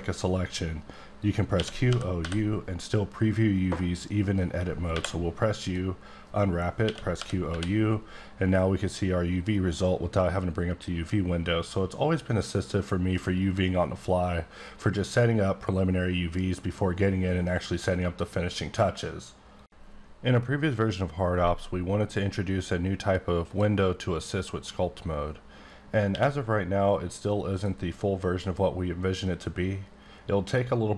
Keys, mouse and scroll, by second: 1.5-2.2 typing, 4.9 u, 5.5 click, 6.8-7.5 typing, 24.4 click, 26.1 q, 27.5 click, 29.3-30.8 drag.